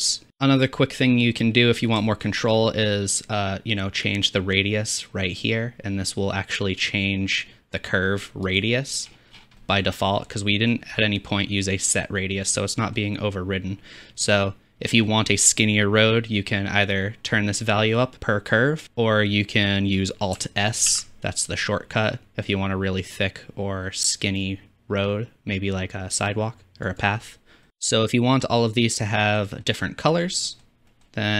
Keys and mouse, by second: 0.3-1.8 drag, 0.3 n, 1.8-2.4 shift+middle drag, 2.4-14.8 drag, 18.8-20.8 drag, 21.0 alt+s, 27.0 click, 27.7 shift+n, 28.2-31.3 middle drag.